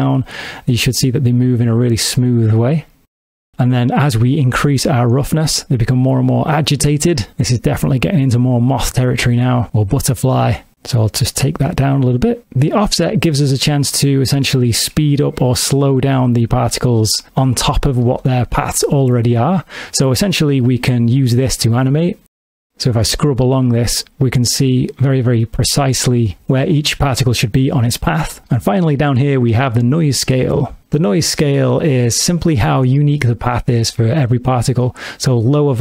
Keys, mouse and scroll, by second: 3.8 click, 12.4 click, 18.5 space, 23.0 click, 30.8 click, 30.8 space, 33.2 click.